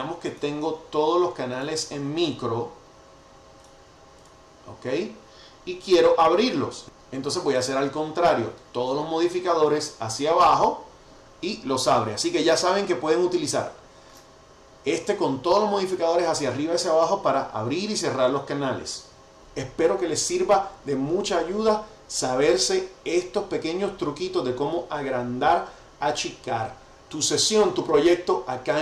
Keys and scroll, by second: 10.3 ctrl+alt+super+Down, 12.3 ctrl+alt+super+Up.